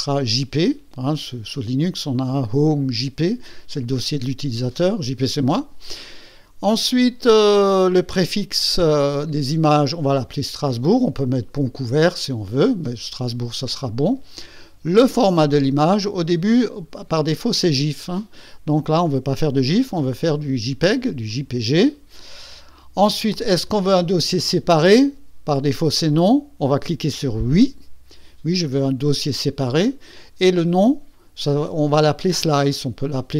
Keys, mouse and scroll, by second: 0.1 click, 16.5 click, 21.3 click, 23.6 click, 27.1 click.